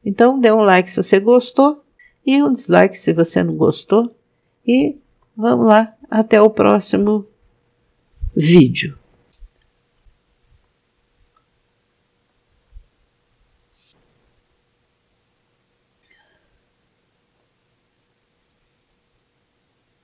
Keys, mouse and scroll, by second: 5.1 KP_0, 10.0-10.7 alt+shift+middle drag, 11.4-12.3 shift+middle drag, 12.7 scroll down 3.